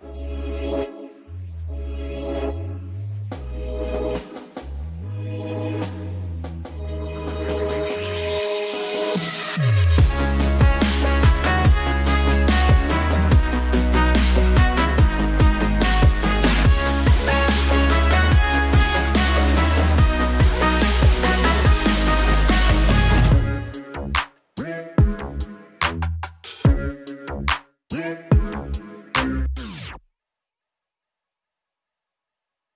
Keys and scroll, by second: 7.5 KP_1, 7.7 KP_9, 7.7 KP_8, 14.5 KP_2.